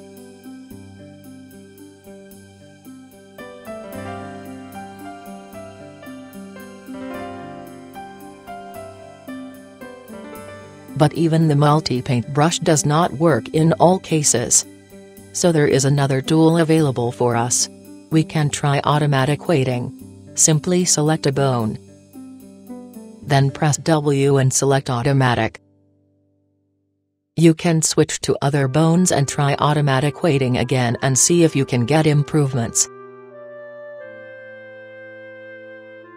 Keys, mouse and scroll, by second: 1.7-3.8 middle drag, 5.6 middle click, 5.7-6.0 right drag, 6.0-7.2 middle drag, 8.8-10.3 middle drag, 11.2-12.8 middle drag, 12.9-14.5 middle drag, 15.2-15.9 middle drag, 16.7-19.4 drag, 18.6-19.2 right drag, 19.4 middle click, 20.3 middle click, 25.0 w, 29.8 click, 29.8-32.3 right drag, 32.0 w, 34.7-36.1 middle drag.